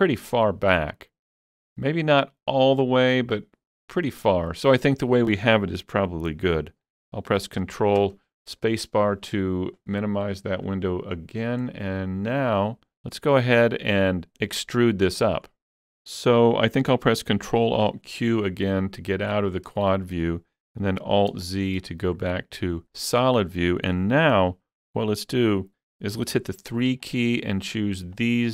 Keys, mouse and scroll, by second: 1.8-5.3 shift+middle drag, 1.8 scroll up 1, 3.0 scroll down 1, 7.6 shift+middle click, 7.6 scroll down 1, 8.0 ctrl+space, 10.0-10.7 scroll down 4, 10.7 middle click, 11.4 scroll up 2, 11.7-14.1 middle drag, 16.8-19.9 middle drag, 16.8 scroll up 1, 17.6 ctrl+alt+q, 19.5 scroll down 1, 21.0 alt+z, 21.2 scroll down 2, 21.5 shift+middle click, 21.8 shift+middle click, 23.2 shift+middle click, 26.2 middle click, 26.2 3, 27.1 click, 27.7 shift+click, 28.2 shift+click.